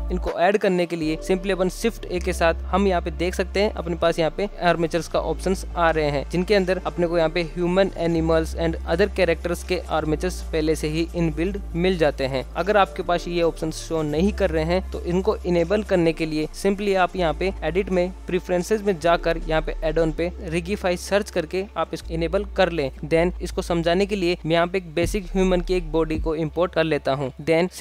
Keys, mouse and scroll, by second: 0.6 shift+a, 18.1-19.1 drag, 24.3 shift+a.